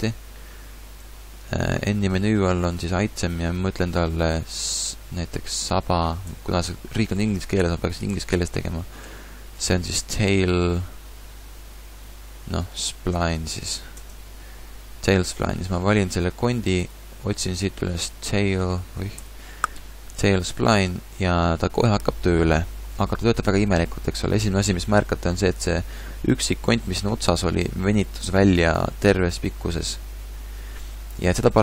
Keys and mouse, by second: 1.0 a, 21.7-24.9 middle drag.